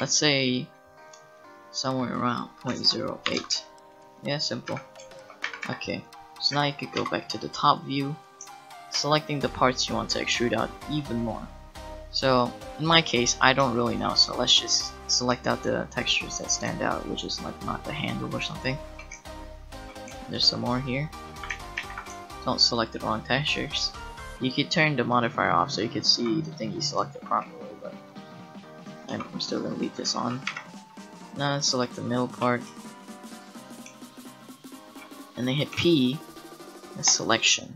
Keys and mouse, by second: 2.3-3.9 drag, 3.9 middle click, 4.7 Tab, 5.4 a, 5.8 a, 6.5 a, 7.0 KP_7, 16.2-21.5 middle drag, 21.5 ctrl+z, 21.8 ctrl+z, 25.0-27.2 middle drag, 26.1 g, 28.1-29.1 middle drag, 29.1 g, 30.5 p, 32.6 click, 33.3 click, 33.6 click, 35.7 p, 35.9-37.6 middle drag.